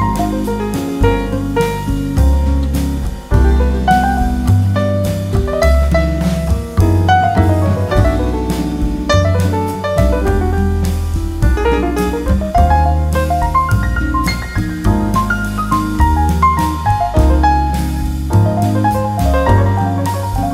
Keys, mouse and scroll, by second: 0.7-2.3 drag, 4.8-7.5 drag, 10.1-11.8 drag, 11.9 click, 12.8-15.6 drag, 16.0-17.7 drag.